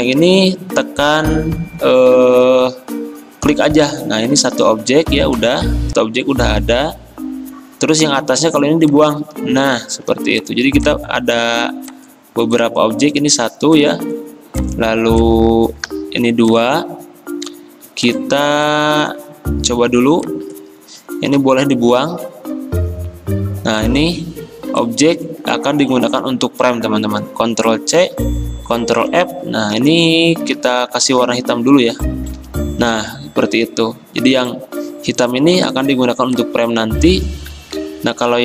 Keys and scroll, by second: 10.1 v, 15.9 ctrl+z, 21.4 Delete, 25.6 ctrl+z, 28.0 ctrl+c, 29.0 ctrl+f, 29.8-30.6 typing, 32.4 ctrl+[, 37.6 x.